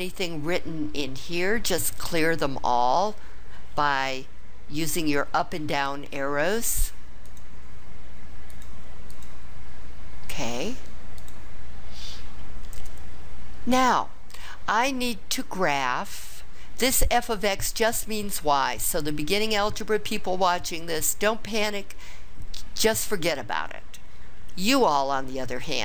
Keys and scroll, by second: 6.7 Down, 7.2 Down, 8.5 Up, 9.1 Up.